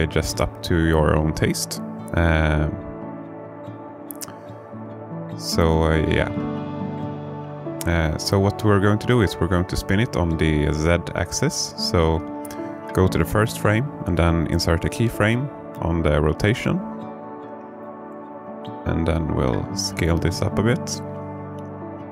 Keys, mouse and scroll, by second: 0.7-1.1 scroll down 3, 1.3 alt+shift+middle click, 2.1-2.5 scroll up 1, 2.7-3.0 scroll up 1, 6.8 r, 7.7 z, 10.2 right click, 13.8 i.